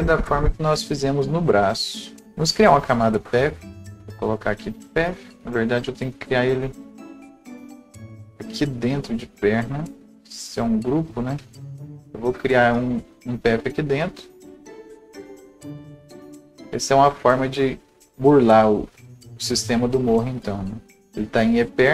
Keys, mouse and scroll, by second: 0.9 right click, 3.9 click, 13.2 click, 16.0 click.